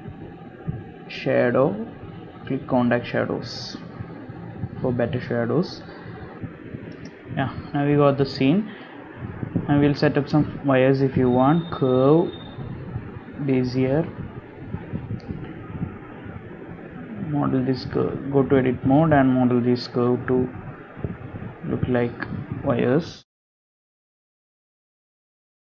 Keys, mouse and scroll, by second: 6.4 scroll down 1, 8.5 space, 10.0-10.4 scroll up 2, 10.5 shift+middle click, 10.9 scroll up 1, 11.2 shift+middle click, 11.6 shift+a, 16.1 scroll up 2, 16.7 r, 17.4 Tab, 18.7 click, 19.0 r, 21.3 g, 22.5 middle click, 23.6 click, 24.1 shift+click, 24.8 KP_3, 25.4 KP_Decimal.